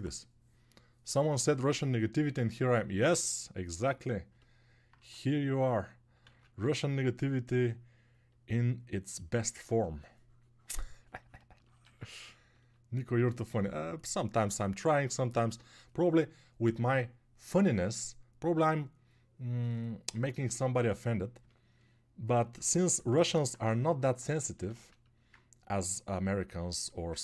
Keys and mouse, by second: 6.4 ctrl+z.